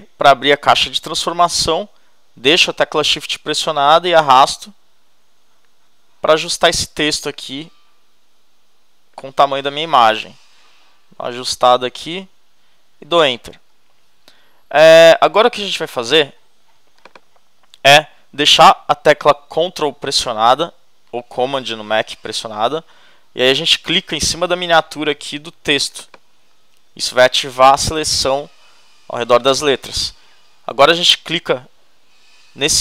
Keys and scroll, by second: 10.2 shift+Up, 13.5 shift+Return.